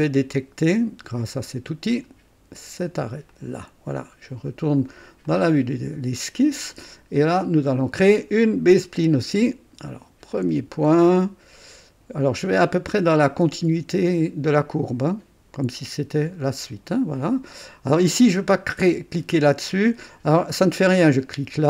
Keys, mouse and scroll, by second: 1.9 click, 3.3 click, 5.2 click, 7.7 click, 10.3 click, 16.6 click, 21.1 click.